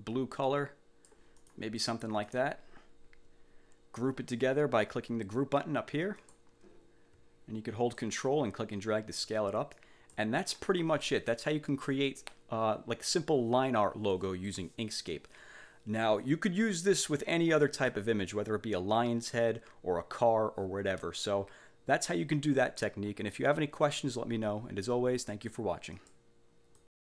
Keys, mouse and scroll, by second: 0.6 click, 1.5 click, 1.9 click, 6.3 click, 8.1-9.6 ctrl+drag, 9.9 ctrl+click, 26.1 click, 26.9 click.